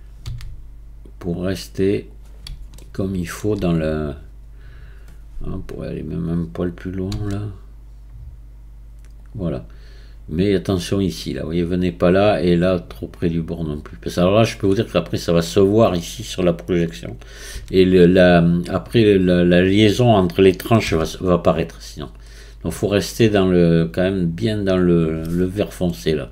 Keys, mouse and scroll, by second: 0.2 g, 2.8-5.8 shift+middle drag, 7.1 s, 13.8 drag, 17.5 s, 20.9 g.